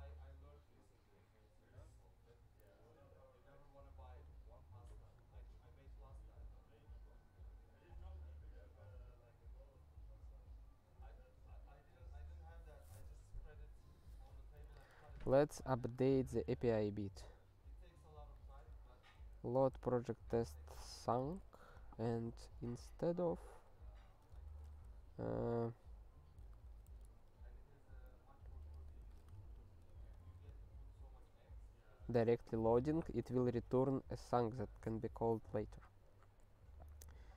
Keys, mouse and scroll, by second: 14.5 click, 14.7 click, 15.4 click, 15.5 click, 16.0 Return, 16.0 typing, 18.4 click, 19.0 ctrl+n, 19.2 ctrl+n, 19.7 ctrl+p, 19.9-21.6 typing, 21.9 ctrl+n, 22.0 ctrl+n, 22.3 ctrl+n, 22.4 ctrl+n, 22.7 ctrl+n, 23.0 ctrl+n, 23.3 ctrl+a, 23.9 Return, 24.0 ctrl+p, 24.2 Tab, 24.5 (, 26.1-27.5 typing, 28.7 space, 29.0 (, 29.4 alt+shift+s, 30.2 ctrl+s, 30.5 ctrl+p, 31.2-36.5 ctrl+p.